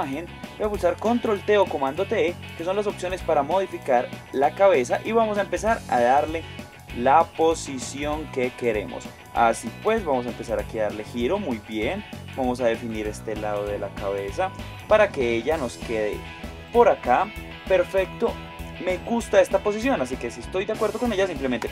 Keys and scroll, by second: 1.7 super+t.